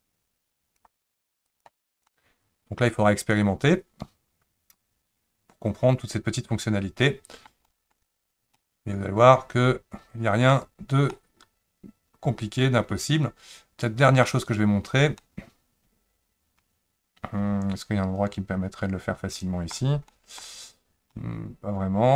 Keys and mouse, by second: 1.5 click, 2.1-7.5 middle drag, 7.7 shift+middle click, 8.6-10.5 middle drag, 11.1-14.2 middle drag, 15.2-19.7 middle drag, 20.1 shift+middle click, 21.1-22.1 middle drag.